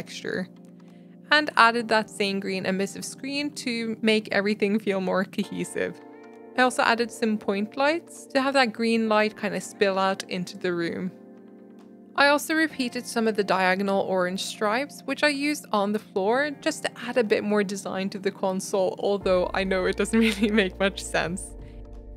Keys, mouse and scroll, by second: 0.1 g, 0.4 Tab, 0.5-0.9 middle drag, 0.9 Tab, 1.2 click, 2.0 scroll down 1, 2.1 middle click, 2.7 click, 5.1-6.1 drag, 6.1 middle click, 6.4 s, 7.1 g, 7.7 s, 8.8 g, 9.1 middle click, 9.4 g, 11.2 r, 11.6 click, 12.4 a, 12.5 r, 13.3 g, 15.1 e, 15.5 Tab, 16.0-17.3 middle drag, 17.3 ctrl+z, 18.7 click, 19.6 e, 20.1 click, 20.4 Tab, 20.5-21.1 middle drag, 21.1 scroll down 2, 21.3-21.8 middle drag, 21.8 scroll down 1, 21.9 middle click, 22.0 scroll up 3.